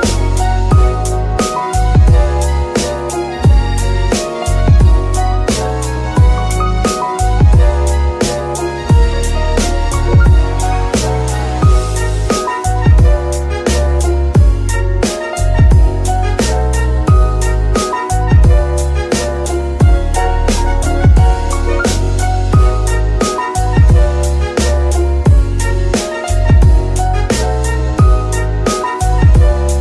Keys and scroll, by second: 2.5 Escape, 4.1 g, 6.1 g, 8.8 alt+g, 16.1 g, 16.3 y, 20.1 Escape, 21.5 alt+g, 22.3 g, 22.8 Escape, 23.5 g, 25.8 Escape, 26.3 g, 26.9 Escape, 27.6 g, 28.2 z.